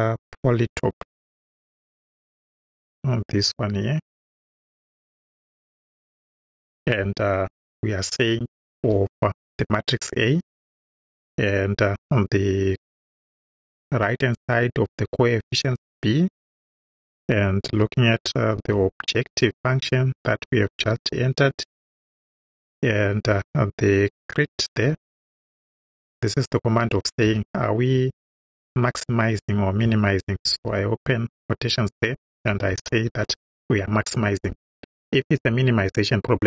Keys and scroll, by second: 1.0 p, 1.6 o, 9.4 shift+a, 10.5 shift+,, 13.0 b, 16.9 ,, 17.7 o, 18.6 b, 20.8 j, 23.2 ,, 24.9 c, 25.3 r, 26.8 i, 27.3 t, 28.7 =, 30.5 shift+', 32.3-33.6 typing.